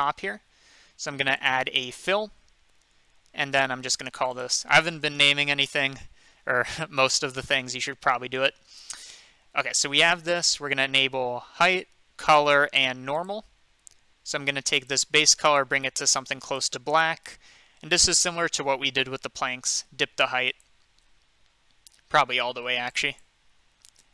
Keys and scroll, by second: 4.9-6.2 typing, 7.7 typing.